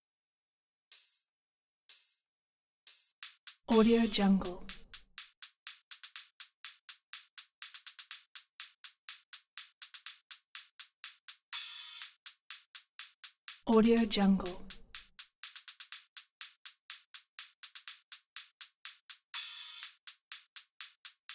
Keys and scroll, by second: 3.2 s.